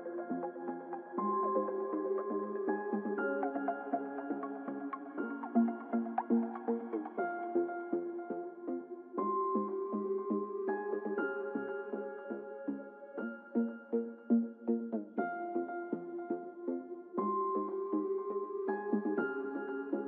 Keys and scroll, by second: 0.1 ctrl+t.